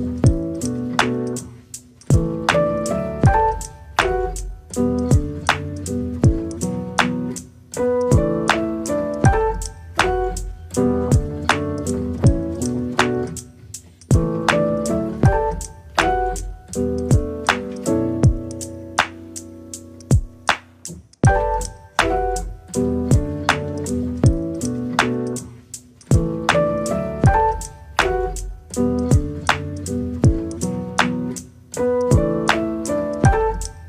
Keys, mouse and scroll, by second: 0.9 scroll up 1, 1.0-2.2 middle drag, 3.4 KP_0, 3.9 middle click, 4.5 KP_0, 4.7-5.6 scroll up 3, 5.6 n, 7.1 n, 7.5 middle click, 8.3 scroll down 1, 8.6-10.5 shift+middle drag, 10.5 click, 11.4 click, 12.1 o, 13.0 click, 13.4 click, 15.3-16.6 scroll down 3, 16.8-17.5 scroll down 3, 17.5-18.7 drag, 19.0 click, 19.2 click, 19.8-21.0 drag, 21.6 click, 22.5 click, 23.4-25.2 drag, 26.8 click, 27.9 click, 30.4-33.3 drag.